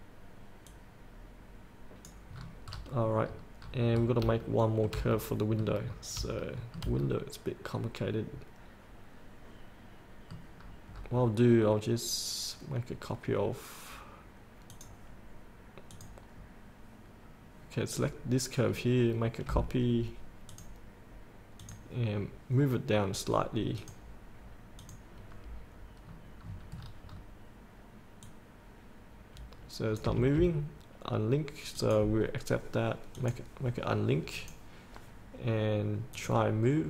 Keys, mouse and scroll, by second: 0.9-2.3 drag, 2.6-3.6 scroll up 1, 4.5 shift+scroll down 1, 5.4 middle click, 5.6 scroll up 1, 6.6 shift+middle click, 7.3-10.6 middle drag, 10.8 scroll down 1, 14.9 click, 16.6-18.2 scroll up 1, 18.2-19.0 scroll down 1, 20.7-22.9 drag, 26.3-26.9 scroll down 2, 28.4-30.3 drag, 31.9-36.8 drag.